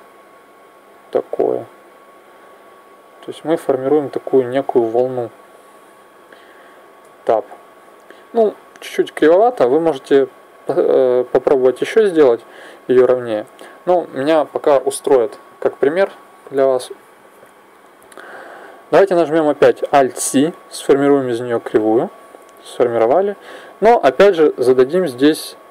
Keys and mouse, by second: 0.2 right click, 0.9 click, 2.9 right click, 3.7 click, 6.7 Tab, 7.5-10.1 middle drag, 11.7-19.7 middle drag, 19.7 alt+c, 23.2 middle click, 24.0-25.7 drag.